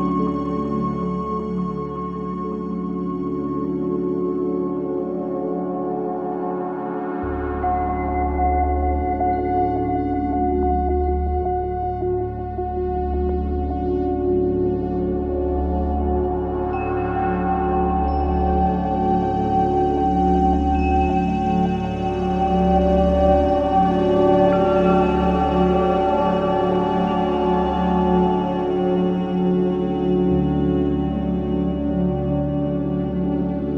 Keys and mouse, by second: 3.8-5.7 alt+middle drag, 5.7 alt+click, 5.9-7.0 alt+middle drag, 7.0 alt+click, 7.2-8.0 typing, 7.9-9.7 alt+drag, 12.1-13.9 drag, 14.3-16.8 drag, 17.2-19.3 alt+drag, 20.2-21.2 drag, 21.3-24.1 drag, 24.1 Delete, 26.1-29.1 drag, 26.8-29.2 typing, 29.2 click, 30.5-32.3 drag.